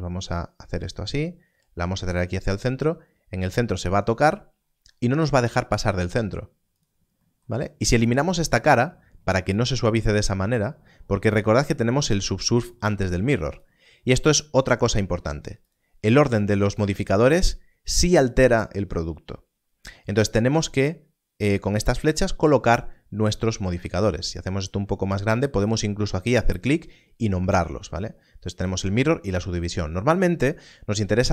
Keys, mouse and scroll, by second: 3.5 click, 4.3 scroll up 1, 5.8 x, 6.7 click, 13.5 click, 24.6 click.